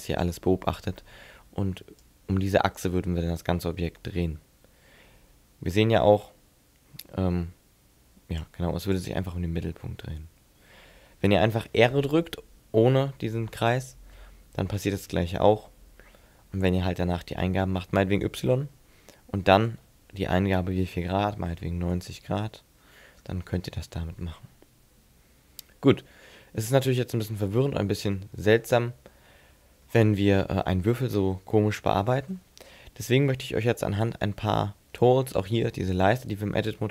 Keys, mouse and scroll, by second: 2.0 click, 8.5 click, 10.0 middle click, 14.1 r, 26.7 middle click, 29.9 middle click, 31.8 Tab, 36.6 Tab.